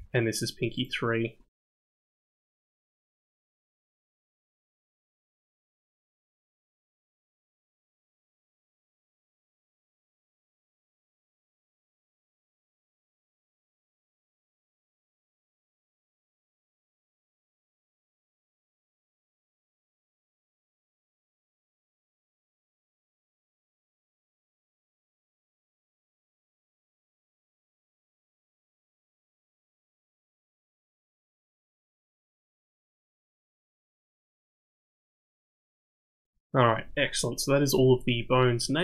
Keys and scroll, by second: 16.9 d, 19.6 BackSpace, 19.6 BackSpace.